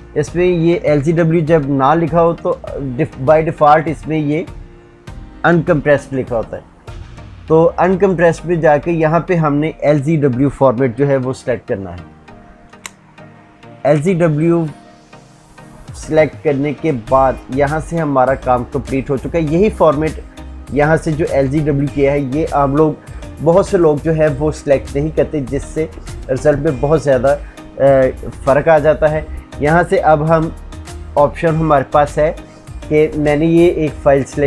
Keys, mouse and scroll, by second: 20.4 click, 21.2 click, 34.3-34.4 drag.